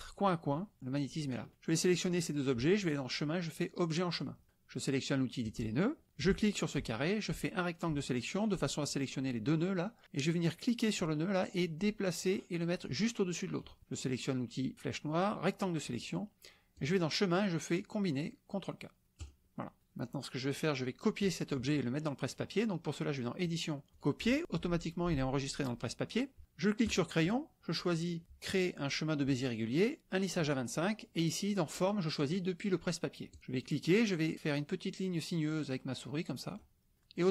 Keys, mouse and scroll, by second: 1.6-2.2 drag, 2.8 click, 4.2 drag, 5.4 click, 6.2 click, 7.4-8.4 drag, 10.9-13.7 drag, 14.7 drag, 15.2-15.8 drag, 16.7 click, 19.2 click, 23.4 drag, 24.0 click, 26.8-27.1 drag, 31.7 click, 33.3 click, 33.6-36.8 drag.